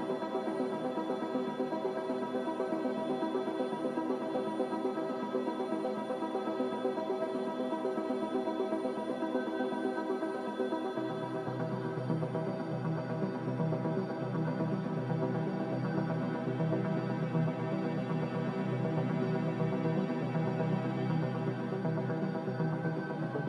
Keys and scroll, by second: 5.8 q, 9.8 x, 16.4 x, 18.6 x.